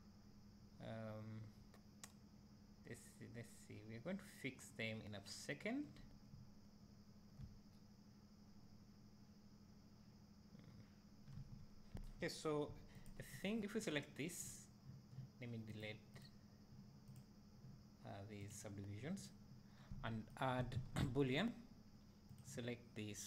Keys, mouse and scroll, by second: 8.3 `, 13.4 click, 15.9-17.3 drag, 18.6 click, 21.5-23.2 drag.